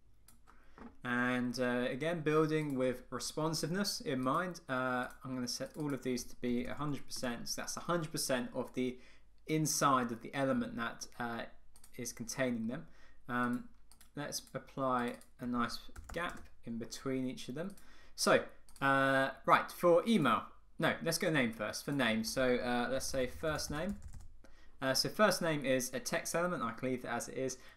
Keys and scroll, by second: 7.3 Return, 16.4 Return.